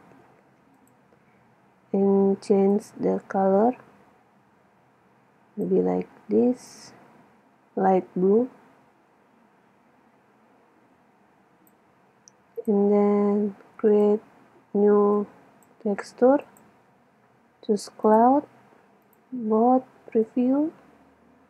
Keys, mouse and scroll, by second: 0.8-2.7 drag, 6.8-8.7 drag, 12.6-18.3 drag, 19.1-21.4 drag.